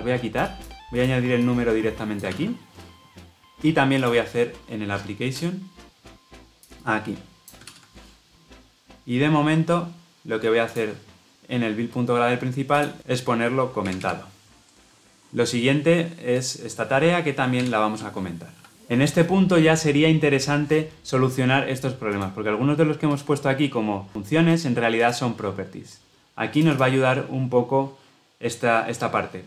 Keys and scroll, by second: 2.2 ctrl+v, 7.6 ctrl+v.